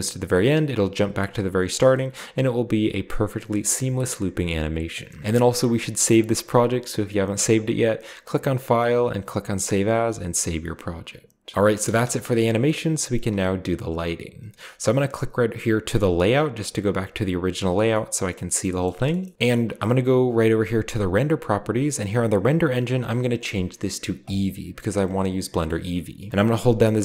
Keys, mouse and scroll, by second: 1.7-2.6 scroll up 1, 2.9-3.7 scroll down 1, 3.1-3.7 middle drag, 3.7-4.0 scroll up 1, 5.1 space, 5.2-5.8 middle drag, 5.2-5.8 scroll up 1, 8.7-9.4 drag, 11.5 ctrl+b, 11.5 click, 11.8 space, 12.3 middle click, 13.1 space, 17.0 click, 17.8 scroll down 1, 17.9-19.3 middle drag, 19.3 click, 21.0 click, 22.3 click, 24.2-25.2 drag, 25.2-25.9 scroll up 1, 25.5-26.2 middle drag, 26.6-27.0 z.